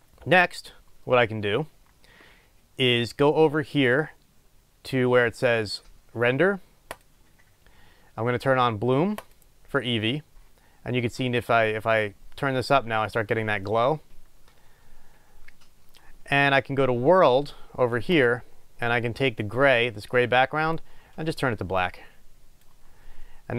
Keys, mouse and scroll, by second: 11.5-19.6 drag.